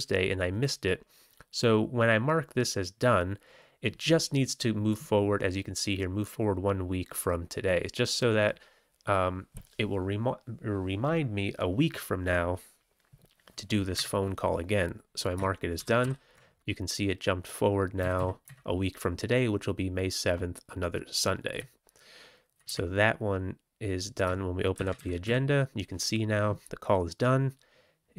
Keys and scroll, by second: 13.9 Up, 15.7 ctrl+c, 15.9 ctrl+t, 17.9 Down, 18.1 Down, 18.4 Up, 21.5-22.5 Left, 22.6 Up, 24.7 ctrl+c.